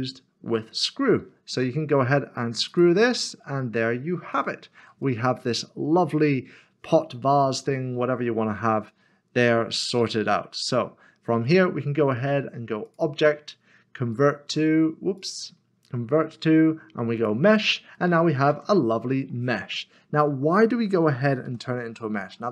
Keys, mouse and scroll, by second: 2.7 click, 3.7-4.2 scroll down 1, 4.3 shift+middle click, 5.0 middle click, 12.9 click, 15.2 click, 18.0 middle click, 19.0 middle click, 19.8 scroll up 1, 20.8-21.2 scroll down 1, 21.5 ctrl+z, 22.0 ctrl+z.